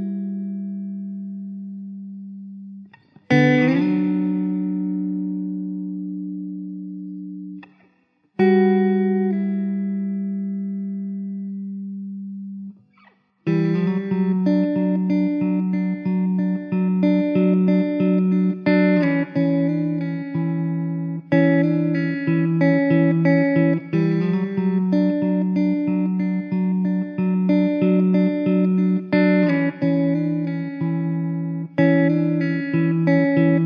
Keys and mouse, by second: 13.3 middle click, 17.2 alt+w, 18.9 middle click, 22.4 middle click, 28.8 middle click.